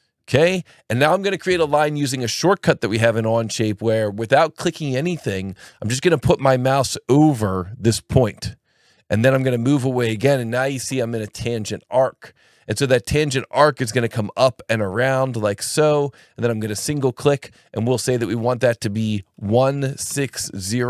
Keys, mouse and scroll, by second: 16.8 click, 19.4 KP_1, 19.9 KP_6, 20.1 KP_0.